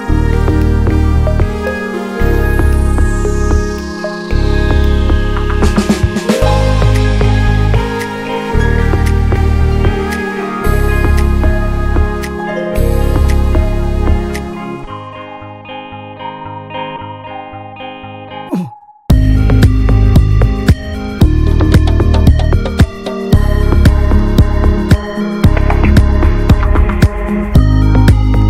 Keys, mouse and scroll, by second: 6.8 click, 7.4 shift+middle click, 8.2 click, 9.0 middle click, 9.1-11.0 scroll up 2, 9.3 shift+middle click, 11.0-12.7 drag, 12.7 ctrl+z, 13.2 ctrl+z, 14.2 scroll down 3, 14.4-16.1 middle drag, 16.1-16.6 drag, 17.2 drag, 17.4-18.0 middle drag, 18.0 scroll up 1, 18.2-19.8 middle drag, 20.2 drag, 20.4-21.7 middle drag, 21.7 click, 23.6-24.1 drag, 24.1-24.7 middle drag, 24.7 click, 25.0 middle drag, 25.1-26.8 scroll up 1, 26.8 click, 26.9 click.